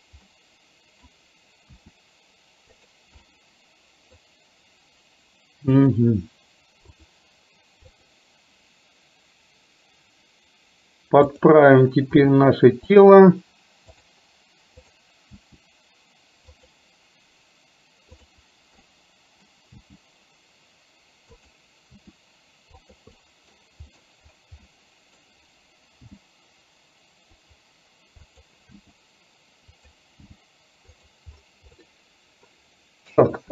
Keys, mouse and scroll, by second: 0.5-1.9 middle drag, 1.9 r, 3.2-4.4 middle drag, 5.7 click, 8.0 click, 11.4 click, 12.4 r, 14.1 click, 15.4 r, 18.2 click, 18.9 middle click, 19.7 g, 22.0 r, 23.2 middle click, 24.0 scroll down 1, 24.6-25.1 scroll down 1, 25.1 middle click, 26.2 g, 28.9 r, 30.2 g, 31.9-32.4 scroll up 1, 32.4 middle click, 32.5-33.2 scroll down 1, 33.2 a.